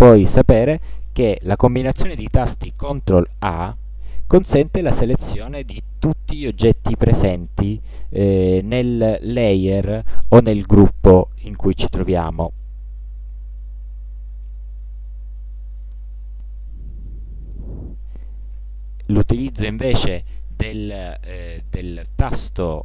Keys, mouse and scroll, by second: 3.6 ctrl+a, 15.8 click, 16.8 click, 17.6 middle click.